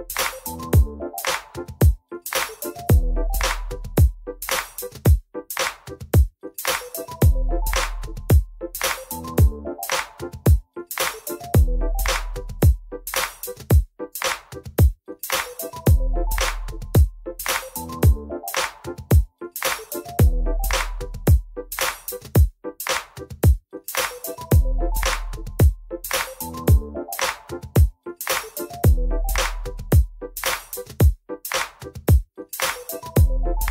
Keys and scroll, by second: 6.3 F4, 13.4 F4, 15.3 F4, 17.1 F4, 18.8 ctrl+r, 19.8 ctrl+r, 23.4 F3, 24.4 F3, 25.7 ctrl+c, 30.5 2, 32.9 F4.